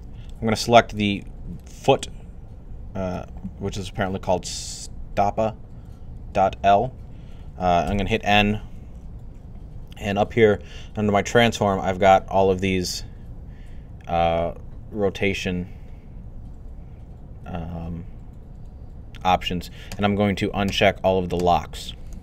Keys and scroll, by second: 7.5-8.2 typing.